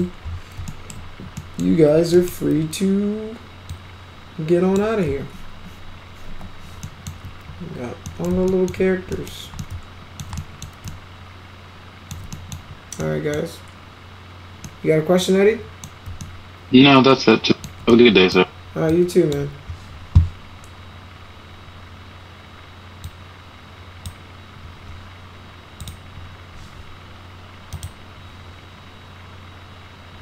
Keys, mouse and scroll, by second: 0.7 alt+middle click, 1.4 middle drag, 2.2 middle click, 3.7-4.8 drag, 6.3 alt+q, 6.8 alt+middle click, 8.1 middle click, 8.5 alt+middle click, 9.1 middle drag, 9.6-10.2 alt+middle drag, 10.4 middle drag, 10.9-12.1 alt+middle drag, 12.3 middle drag, 13.0-13.4 middle drag, 14.7-15.8 middle drag, 16.2-17.6 alt+middle drag, 17.9-18.3 middle drag, 18.9-19.3 drag, 23.1 click, 25.8 click, 27.7 click.